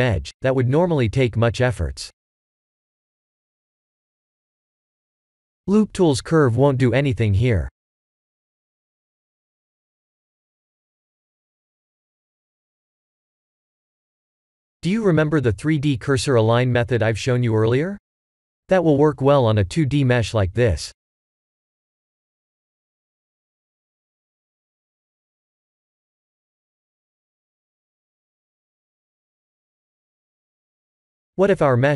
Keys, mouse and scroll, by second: 0.1 scroll up 3, 4.4 click, 4.7 b, 6.1 right click, 9.8 click, 12.6 click, 13.1 b, 15.6 g, 18.0 ctrl+z, 19.1 click, 20.0 shift+click, 21.0 shift+s, 24.9 click, 25.2 b, 29.4 shift+s, 31.5 click.